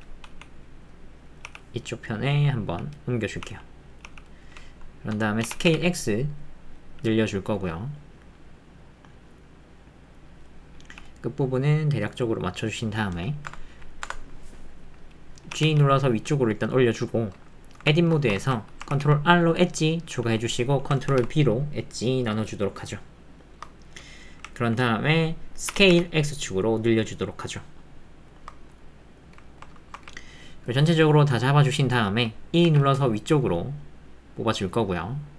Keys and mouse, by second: 1.4 g, 3.4 s, 4.0 g, 5.4 s, 5.7 x, 10.8 g, 14.0 Tab, 14.5 middle click, 15.5 g, 15.6 z, 17.1 middle click, 17.8 Tab, 18.2 shift+middle click, 18.4 ctrl+middle click, 18.9 ctrl+r, 19.9 middle click, 24.4 alt+click, 25.7 s, 28.7 middle click, 29.2 click, 29.4 ctrl+middle click, 29.8 shift+middle click, 30.0 ctrl+middle click, 30.9 click, 31.8 middle click, 31.9 click.